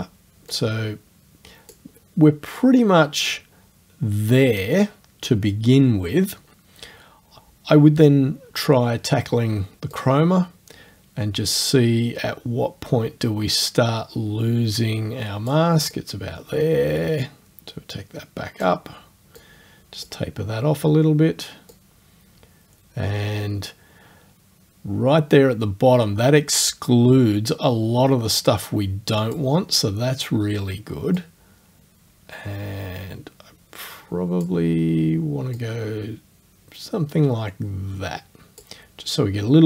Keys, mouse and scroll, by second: 0.5 click, 10.0-15.7 drag, 16.0-18.8 drag, 19.4 click, 21.7-29.5 drag, 31.2 click, 35.6 click.